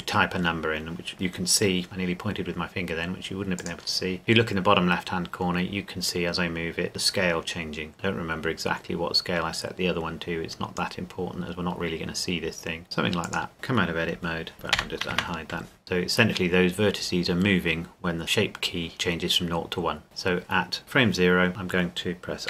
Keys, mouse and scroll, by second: 3.6 click, 13.2 click, 13.5 Tab, 14.8 alt+h, 15.1 Tab, 15.8 click.